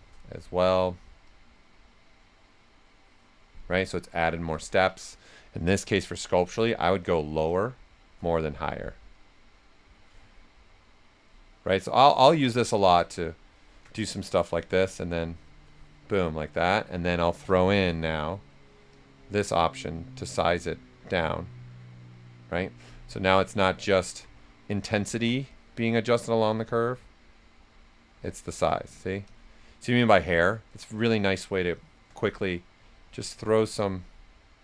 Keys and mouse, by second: 1.2-4.5 drag, 4.5 ctrl+z, 5.6-9.1 drag, 9.1 click, 10.2 right click, 11.8 click, 12.7 ctrl+z, 12.8 s, 12.9 click, 13.9 click, 15.0 click, 16.1-17.5 right drag, 17.5 click, 23.6 right click, 23.6 right click, 24.7 right click, 25.5-28.8 drag, 28.8 alt+right click, 29.2 click, 29.7 right click, 30.7-32.2 shift+drag, 32.2 right click, 32.9 click, 34.1-34.6 drag.